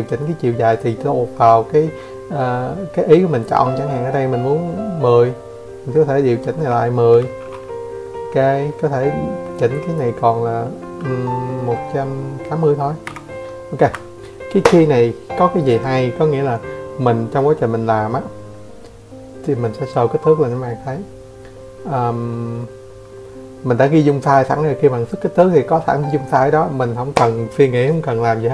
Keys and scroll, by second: 5.1 8, 5.9 Escape, 23.6 Escape, 24.8 Escape.